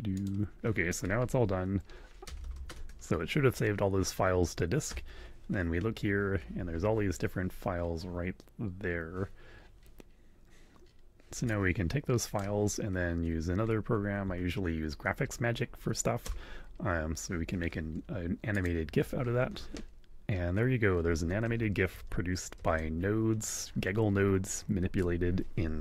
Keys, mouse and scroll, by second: 0.1 click, 2.2 ctrl+Return, 2.6 ctrl+Up, 4.9 Return, 11.5-12.6 super+drag, 14.2 Home, 15.1 End, 16.2 Return, 18.5 click, 21.1 click, 25.6 alt+Tab.